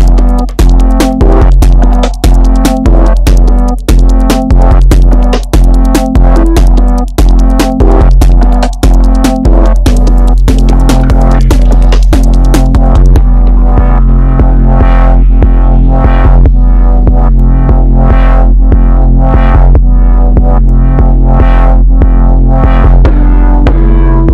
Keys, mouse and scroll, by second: 3.4 shift+middle click, 3.8-4.4 scroll up 2, 4.5 shift+middle click, 4.9-5.6 scroll up 1, 5.6 r, 11.2 alt+click, 17.2 click, 19.3-19.7 scroll down 1, 19.7 shift+middle click, 20.3-20.9 scroll down 1, 20.9 shift+middle click, 21.3-21.7 scroll up 1, 21.7 Tab, 21.9-22.2 scroll down 2, 22.2-24.3 middle drag.